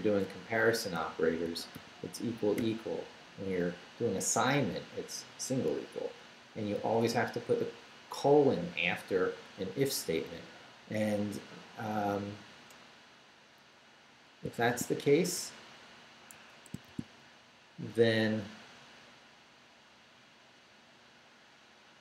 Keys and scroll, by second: 0.0-2.6 typing, 6.8 shift+;, 10.5 Down, 11.4 Left, 14.6 shift+v, 15.4 shift+BackSpace, 15.9 BackSpace, 16.3 Escape, 16.9 shift+v, 17.1 shift+Down, 19.4 Down.